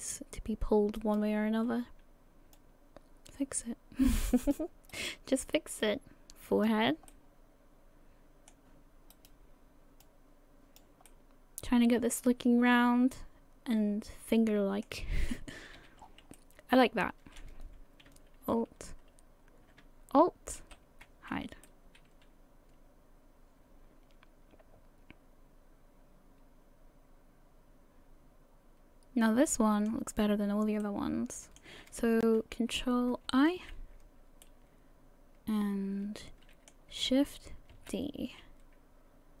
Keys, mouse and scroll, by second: 1.0 right click, 2.5 click, 4.9 right click, 5.8 click, 7.1 middle click, 9.1 right click, 10.0 click, 11.1 middle click, 15.6 a, 15.8 a, 16.0-16.3 scroll down 5, 16.3 middle click, 20.6 alt+h, 21.7 middle click, 30.8 middle click, 33.3 ctrl+i, 34.4 middle click, 38.0 shift+d.